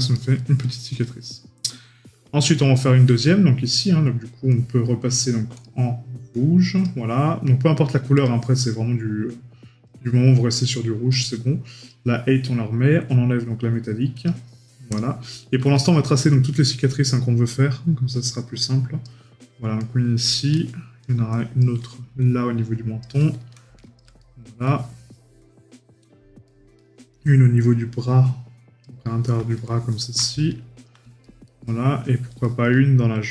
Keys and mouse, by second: 0.8 middle click, 2.7 right click, 15.6 middle click, 16.6 right click, 19.8 right click, 20.5 middle click, 24.2 right click, 24.8 middle click, 26.6 right click, 29.7 middle click, 31.2 right click, 31.8 middle click.